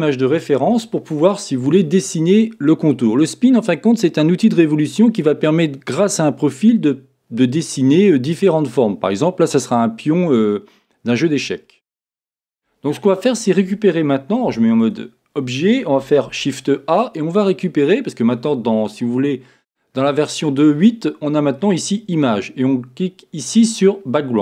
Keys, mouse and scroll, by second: 2.3-4.1 scroll up 1, 14.5 Tab, 16.2 shift+a.